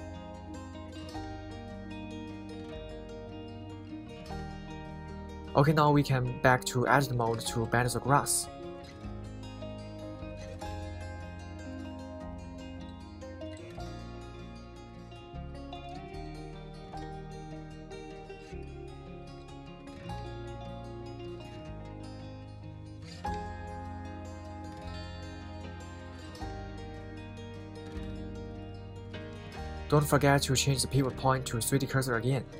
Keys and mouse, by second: 1.4 KP_3, 2.0 KP_1, 3.2 right click, 4.3 Tab, 6.5 KP_3, 8.7 g, 11.4 Escape, 12.3 g, 12.7 y, 23.5 click, 25.7 Tab, 29.2 click, 31.9-32.5 drag.